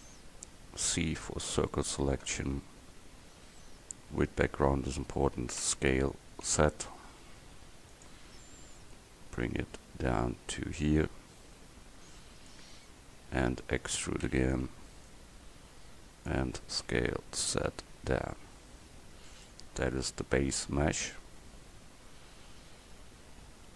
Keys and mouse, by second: 0.9 c, 2.4-4.2 drag, 5.7 s, 9.0-12.6 drag, 14.4 e, 15.1-16.9 drag, 16.9 s.